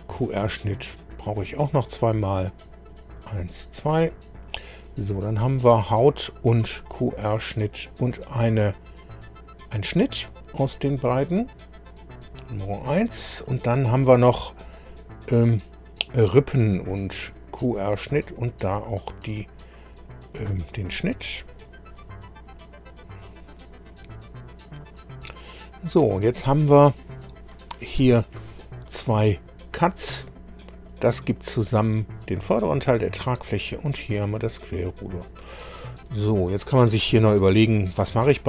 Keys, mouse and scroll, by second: 2.5 click, 3.1 click, 4.3 scroll down 1, 5.3 click, 6.7 ctrl+click, 10.6 click, 16.1 click, 17.2 ctrl+click, 20.9 click, 25.1-25.4 scroll up 1, 27.3 click, 29.3 click, 30.7 click, 33.7 click, 34.3 click, 36.0-37.1 middle drag, 37.3 middle click, 38.1 shift+middle click.